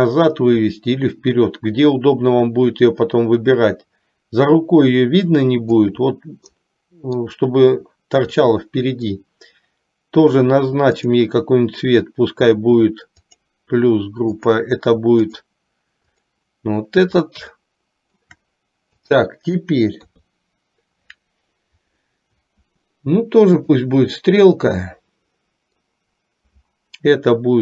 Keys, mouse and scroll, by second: 6.7-7.4 middle drag, 6.7 scroll up 1, 8.6 scroll up 1, 8.8 middle click, 13.3 click, 14.6-15.6 drag, 16.2 click, 17.7-18.4 shift+middle drag, 19.1 click, 20.2 KP_3, 23.6 click, 24.9-26.1 middle drag.